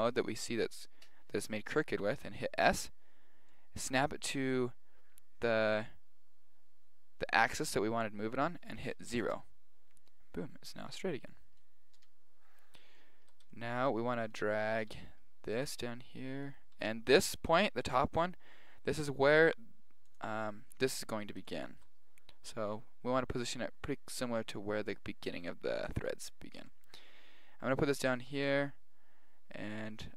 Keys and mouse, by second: 2.7 s, 10.1-14.3 middle drag, 10.8 z, 14.3 right click, 14.9 g, 16.2 right click, 16.5 right click, 16.8 g, 21.2-23.4 middle drag, 26.1 right click, 26.6 g.